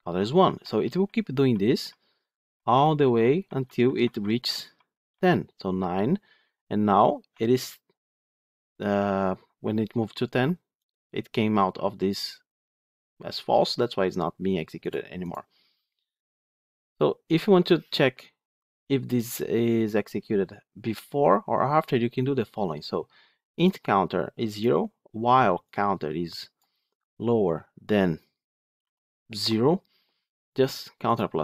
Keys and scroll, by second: 10.6 F8, 16.4 F9.